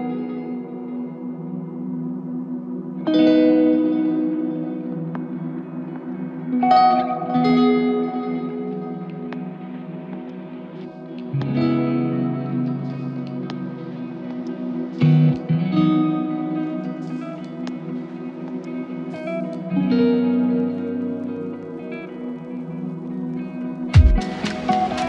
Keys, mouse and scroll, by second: 0.4 alt+c, 0.5 ctrl+click, 1.5 f, 2.2 ctrl+click, 3.1 ctrl+l, 5.2 ctrl+click, 7.2 ctrl+click, 11.4 alt+click, 13.0 typing, 17.7-19.2 typing, 20.5 typing, 23.0 double click.